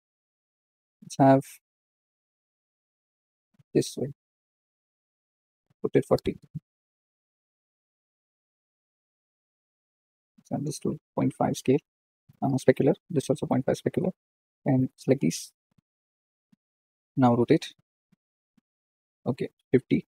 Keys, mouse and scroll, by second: 1.7 r, 6.8 KP_0, 7.9 click, 10.8-14.7 drag, 16.2 click, 17.5 r, 18.8-19.6 scroll down 1, 19.6 scroll down 1, 19.9 shift+d.